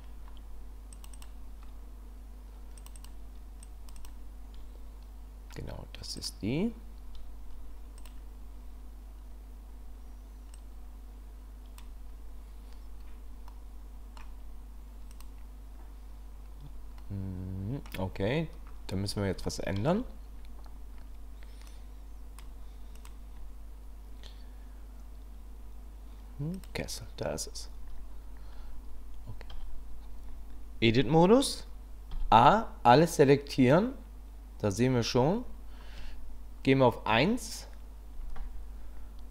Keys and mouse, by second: 10.5-11.8 drag, 13.5 middle click, 15.1 click, 17.0-17.9 middle drag, 19.4 shift+click, 21.7 click, 23.0 click, 29.5 Tab, 32.1 a, 37.1 KP_1.